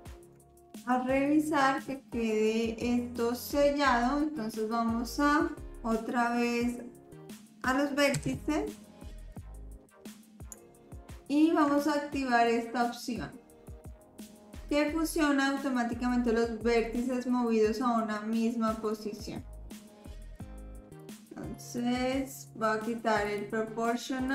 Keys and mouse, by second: 8.2 1, 10.6-11.6 shift+drag, 19.0 click, 21.0 click, 23.3 click.